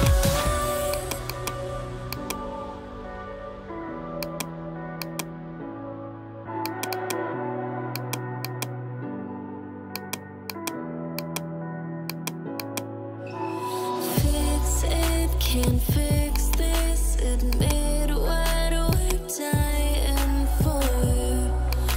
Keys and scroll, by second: 3.6 [, 5.4 ].